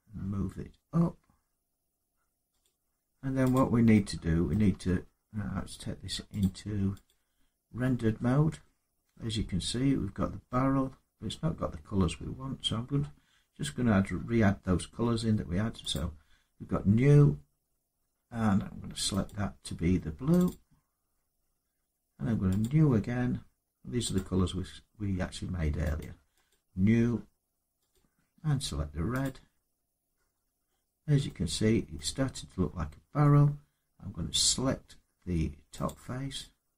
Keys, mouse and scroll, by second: 2.4 click, 3.3 click, 4.3 middle click, 4.5 Tab, 6.2 click, 6.8 click, 8.4 middle click, 10.4 middle click, 15.7 click, 19.2 click, 20.1 click, 20.2 click, 22.4 click, 23.9 click, 26.3 click, 27.7 click, 29.0 click, 30.4 middle click, 31.7 middle click, 32.8 Tab, 35.6 click.